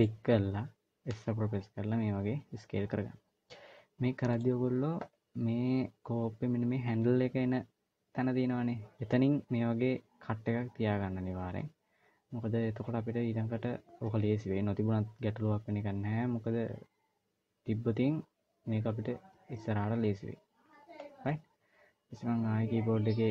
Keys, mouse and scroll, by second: 0.9 s, 19.7-21.1 scroll down 1, 21.1 scroll down 1, 21.3-23.0 scroll down 1.